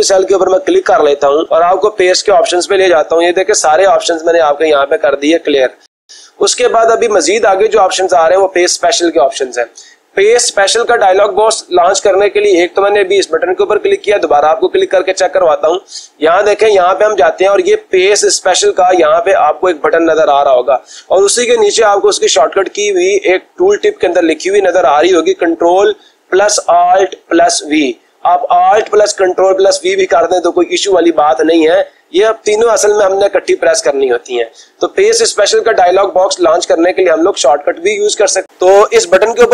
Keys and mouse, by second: 0.6 click, 2.2-3.2 drag, 8.5-9.5 drag, 14.8 click, 16.8-17.8 drag, 36.8-38.1 drag, 38.4 click.